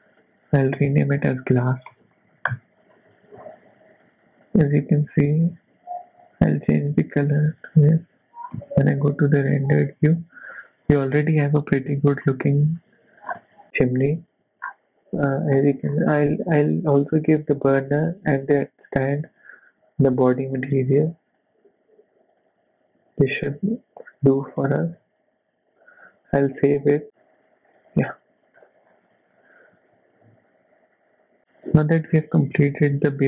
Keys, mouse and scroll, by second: 0.9 click, 2.4 s, 4.0 click, 5.5 click, 6.5 click, 8.5 z, 9.9 middle click, 12.2 middle click, 13.0-14.2 scroll down 5, 14.2 z, 14.6 scroll up 4, 15.6 h, 15.8 scroll up 3, 16.1 shift+middle click, 17.1 click, 17.5 shift+middle click, 17.8-18.3 scroll up 1, 19.3 shift+click, 20.7 click, 21.3 click, 23.2 super+a, 24.7 super+s, 28.6-28.9 scroll down 5, 29.6 z, 31.4 middle click.